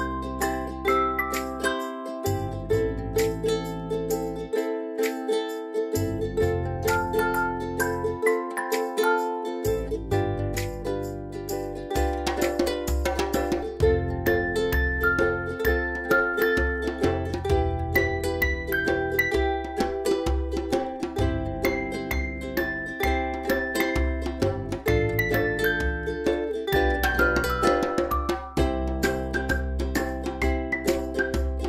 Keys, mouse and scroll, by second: 3.3 click, 10.4 typing, 10.8 click, 13.9 v, 14.4 click, 17.9 space, 18.1 click, 18.2-18.9 space, 22.1 p, 25.7-27.1 drag.